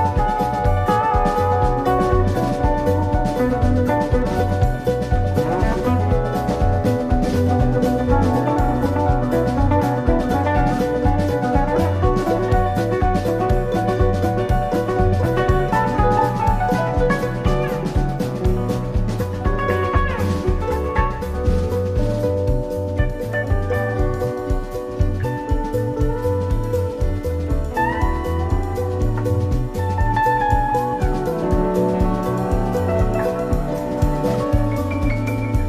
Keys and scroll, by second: 0.6 super+-, 5.1 i, 8.5 i, 25.6 i, 31.2 super+c, 31.6 super+f, 32.1 shift+Right.